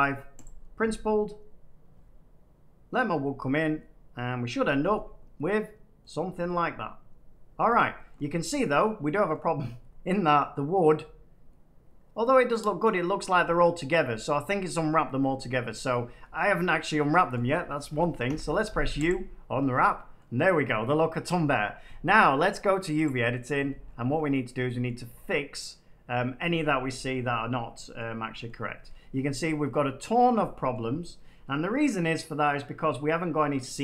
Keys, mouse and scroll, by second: 0.3 click, 4.4 middle click, 5.9 middle click, 6.4 shift+middle click, 6.8 scroll up 1, 7.7 middle click, 8.0 shift+middle click, 8.8 middle click, 9.2 shift+middle click, 10.8 middle click, 12.8 middle click, 13.3 scroll down 1, 13.6 middle click, 13.6 scroll up 1, 14.1 middle click, 14.8 middle click, 15.2 Tab, 16.3 shift+middle click, 18.2 u, 19.0 click, 19.5 Tab, 20.1 scroll, 23.0 click, 23.8-24.2 scroll, 24.8 shift+middle click, 26.8 shift+middle click, 27.0 shift+middle click, 28.4 shift+middle click, 30.4 shift+middle click, 30.7 shift+middle click, 30.9 middle click, 31.0 middle click, 32.3 middle click.